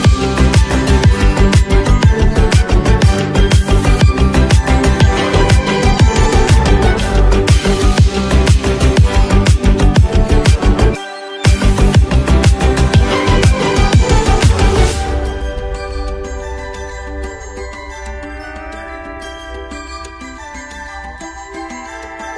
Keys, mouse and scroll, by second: 0.0-1.6 typing, 2.0 click, 8.1 Down, 14.9 scroll down 1.